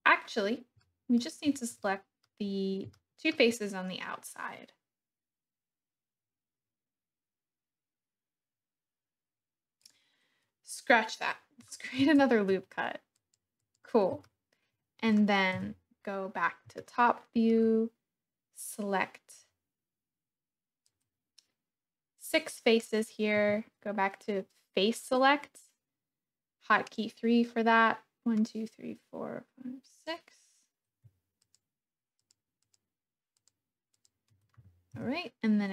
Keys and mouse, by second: 0.8 middle click, 1.8 middle click, 2.9 shift+middle click, 11.9 ctrl+r, 13.6 click, 14.2 shift+click, 15.5 KP_7, 16.7 shift+click, 17.1 shift+middle click, 20.8-23.4 drag, 23.4 3, 24.3-26.9 drag, 29.8 click, 31.5 shift+click, 32.6 shift+click, 33.3 shift+click, 33.9 shift+click, 34.9 KP_1.